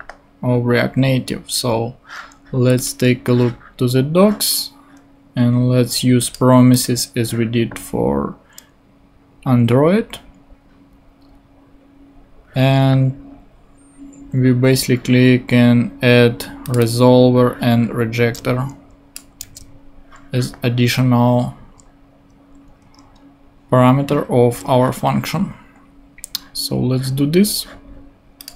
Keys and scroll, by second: 19.4 super+c, 23.0 super+Tab.